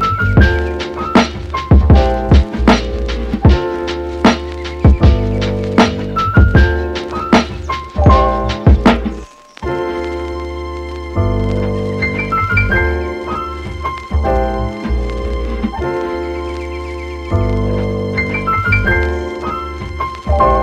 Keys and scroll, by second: 3.8 space.